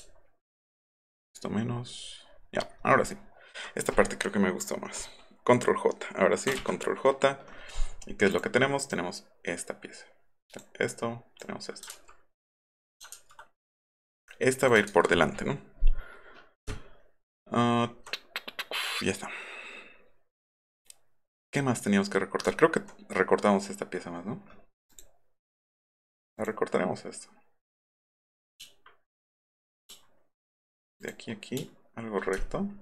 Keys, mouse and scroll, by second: 0.8 alt+click, 1.7-2.4 alt+scroll up 3, 6.6 ctrl+j, 8.3 click, 8.9-10.6 drag, 10.9-11.4 drag, 11.9 ctrl+z, 13.1 ctrl+z, 13.8 click, 14.9 ctrl+z, 16.8 alt+scroll up 2, 16.8-17.2 alt+scroll down 4, 17.3 alt+scroll up 2, 18.1-18.5 scroll down 2, 22.5 alt+middle click, 22.5 alt+scroll up 1, 24.9 click, 26.4 click, 27.9 click, 29.5 shift+click, 31.0 shift+click.